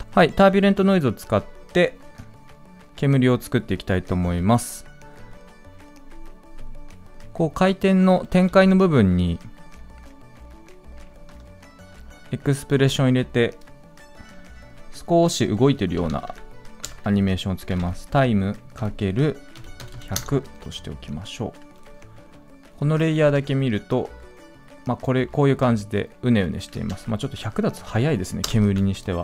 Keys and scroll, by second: 0.0 ctrl+z, 8.4 ctrl+z.